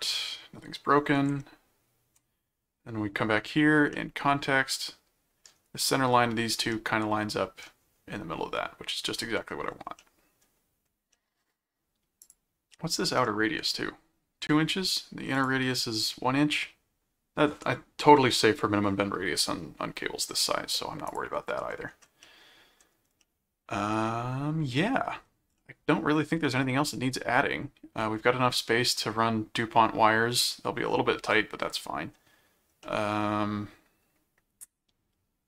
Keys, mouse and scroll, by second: 1.3 ctrl+Tab, 3.9-5.5 middle drag, 6.7 middle click, 9.4-9.8 scroll up 2, 9.8 scroll down 2, 10.0 middle click, 10.2-10.5 scroll up 1, 10.5-11.1 scroll down 4, 11.1 middle click, 12.2 click, 12.7 middle click, 15.3 click, 21.0 click, 22.2 middle click, 23.2-25.2 middle drag, 25.5-29.0 middle drag, 31.3 middle click, 32.8-35.4 middle drag.